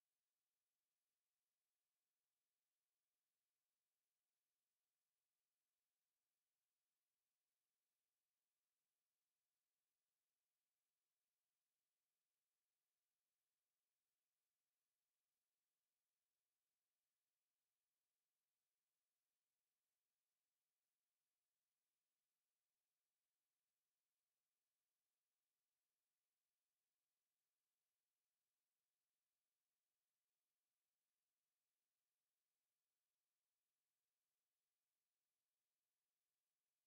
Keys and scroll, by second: 18.9 ctrl+z.